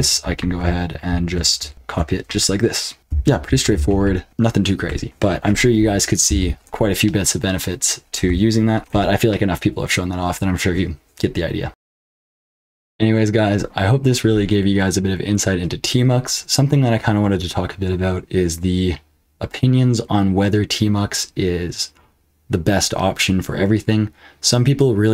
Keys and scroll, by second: 0.0-4.8 typing, 6.2 ctrl+d, 8.8 ctrl+c.